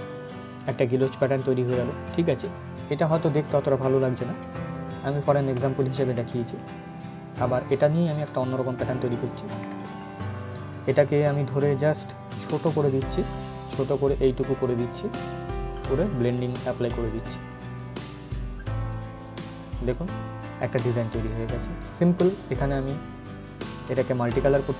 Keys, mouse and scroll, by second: 3.8 ctrl+Num_Lock, 3.8 click, 4.0 ctrl+z, 6.7 click, 9.4 ctrl+shift+z, 10.1-13.6 drag, 13.6 shift+right click, 14.1-18.5 drag, 22.4 right click, 23.0 click.